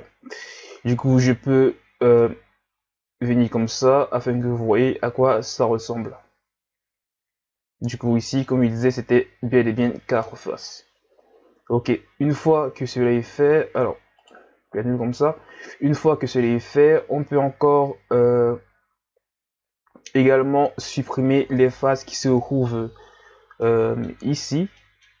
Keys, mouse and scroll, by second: 2.2-5.2 middle drag, 10.2 KP_1, 12.8 scroll up 2, 13.3 s, 23.6-25.2 middle drag.